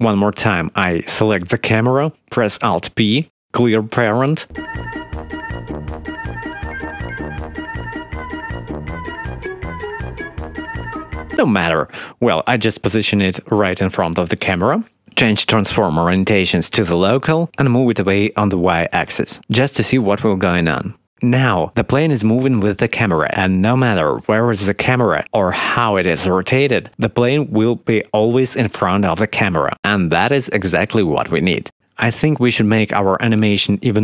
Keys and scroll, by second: 2.6 alt+p, 4.8 alt+p, 6.1 ctrl+p, 6.6 ctrl+z, 6.8 ctrl+p, 8.2 h, 8.9 ctrl+z, 9.7 h, 10.8 ctrl+z, 11.0 ctrl+p, 12.8 g, 13.4 0, 13.9 g, 18.1 g, 18.3 y.